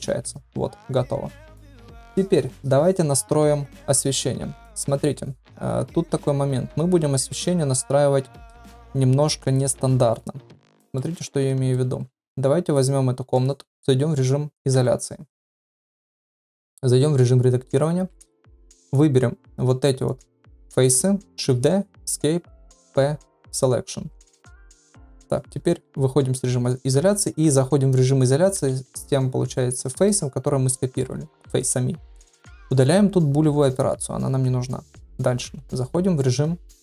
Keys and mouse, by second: 10.9-11.7 middle drag, 12.2 ctrl+s, 14.7 KP_Divide, 16.9 Tab, 18.4 3, 18.9 click, 20.0 shift+click, 21.4 shift+d, 22.8 p, 24.1 Tab, 28.5 KP_Divide, 29.5 middle drag, 30.7-31.0 middle drag, 33.6 click, 34.9 shift+middle drag.